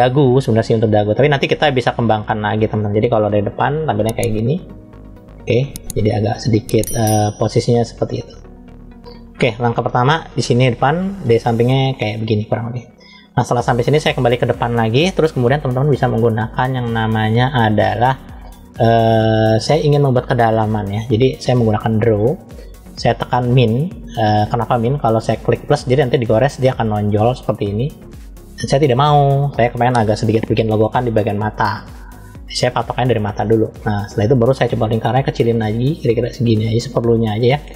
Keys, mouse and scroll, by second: 1.4-2.7 middle drag, 3.2 KP_1, 9.9 KP_1, 10.9 KP_3, 13.9 KP_1, 15.1-15.8 scroll up 2, 16.5-17.8 shift+middle drag, 21.5 click, 23.5 click, 24.9 click, 25.8 click, 28.5 click, 32.4 click, 35.3 f.